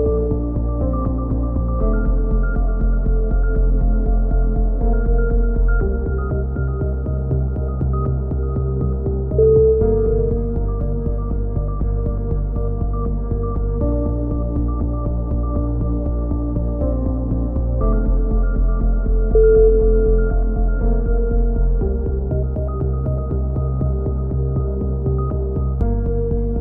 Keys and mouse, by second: 3.6-5.4 middle drag, 5.4-8.5 drag, 7.8 x, 10.1-11.2 drag, 10.9 a, 11.3 Tab, 11.6-12.6 drag, 15.0-16.5 drag, 15.1 Tab, 19.1-20.1 drag, 20.4 click, 21.1 middle click, 21.5 click, 21.9 middle click, 22.1 click, 22.5 middle click, 22.8 click, 25.5 ctrl+z, 25.6 a, 26.0-26.6 drag.